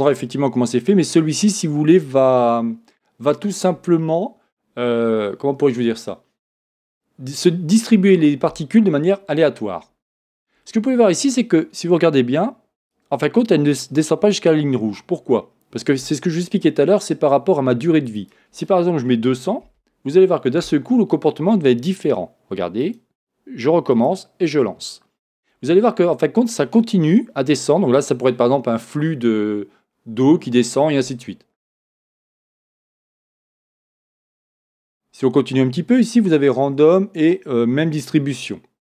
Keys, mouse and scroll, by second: 12.8-13.9 drag, 18.2-32.1 drag, 20.7 Return, 33.6-38.8 drag.